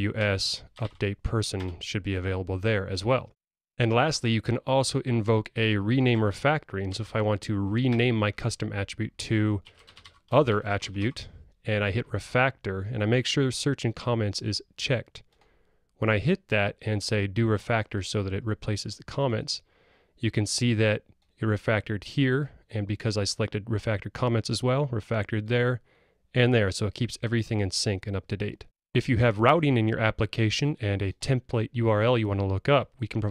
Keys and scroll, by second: 1.7 Return, 7.0 ctrl+alt+t.